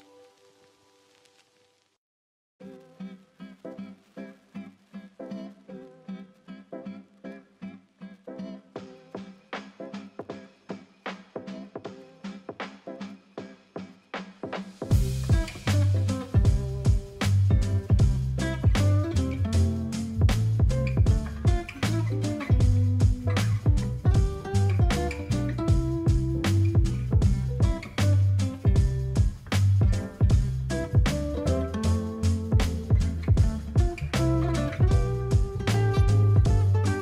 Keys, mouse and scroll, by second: 25.0 ctrl+t, 28.4-31.8 alt+drag, 33.2 ctrl+t.